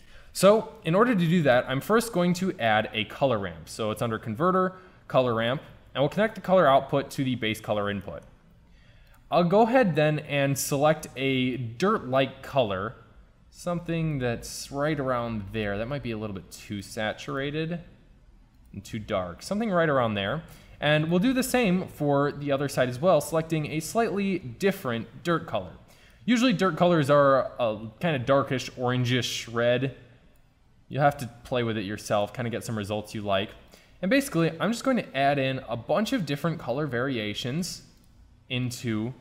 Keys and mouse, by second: 1.5 shift+a, 5.5-7.2 drag, 11.0 click.